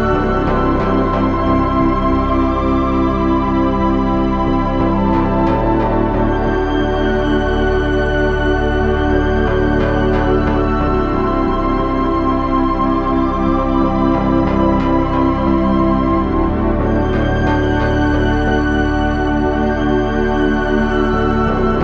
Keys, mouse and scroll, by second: 12.8 c, 17.9 c, 19.3 c.